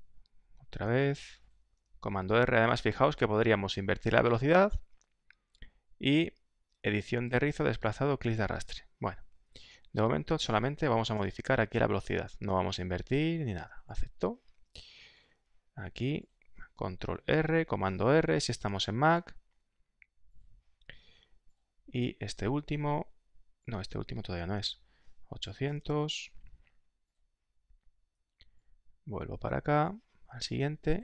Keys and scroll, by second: 1.7 super+r, 10.7-12.3 typing, 17.1 super+r, 18.0-20.4 typing, 24.4 super+r.